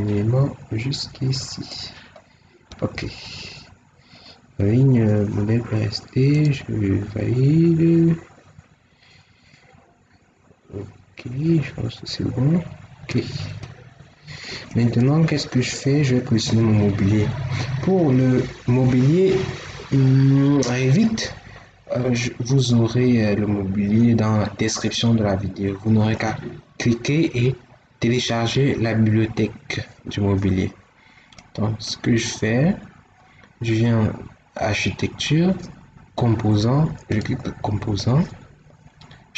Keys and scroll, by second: 2.6 Escape.